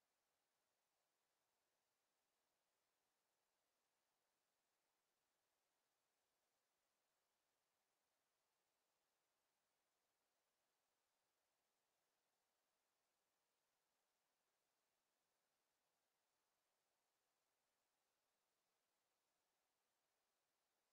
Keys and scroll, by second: 2.3 Escape.